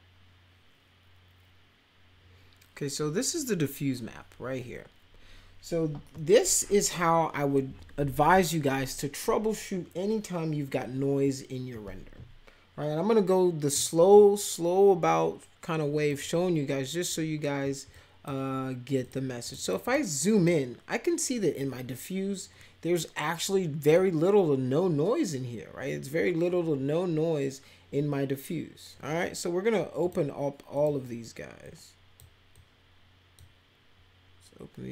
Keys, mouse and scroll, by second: 12.9 ctrl+=, 16.1 click, 17.9 click, 19.0 click, 19.4 click, 19.6 click, 19.8 click, 20.4 click, 23.9 click, 30.0 click, 30.7 click, 31.7 click, 32.5 click.